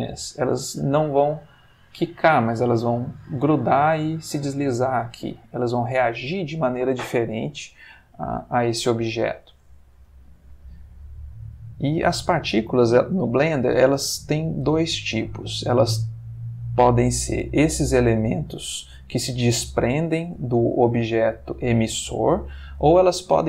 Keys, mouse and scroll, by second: 1.2-1.8 middle drag, 2.0-2.6 ctrl+middle drag, 5.2-5.7 middle drag, 5.8-6.3 ctrl+middle drag, 7.2 middle click, 9.5-10.5 middle drag, 10.7-12.0 middle drag, 20.6 click, 21.2 g, 22.0 Escape.